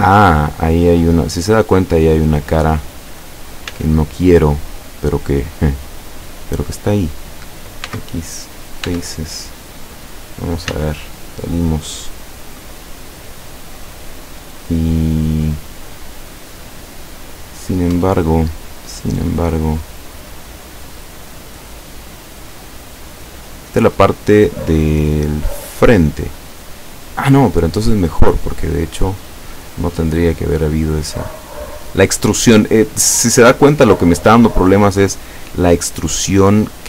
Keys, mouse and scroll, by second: 1.4 scroll up 2, 2.2 scroll down 2, 3.7 z, 4.8 scroll up 2, 5.7 scroll down 2, 6.2 middle click, 6.7 right click, 7.9 x, 8.5 click, 8.9 Tab, 10.7 z, 11.2 scroll down 1, 11.7-14.2 middle drag, 14.3 scroll up 1, 14.8-16.3 middle drag, 16.8-17.7 middle drag, 18.0 Tab, 18.5 middle click, 20.3 right click, 22.2-22.6 scroll down 1, 23.0 scroll down 1, 26.6-28.0 middle drag, 28.1-29.0 scroll up 4, 29.7 scroll up 2, 31.1 right click, 31.6 right click, 32.4 right click, 32.8-33.1 scroll up 2, 33.4 scroll down 2, 33.9 middle click, 35.1 right click, 35.9-36.8 drag.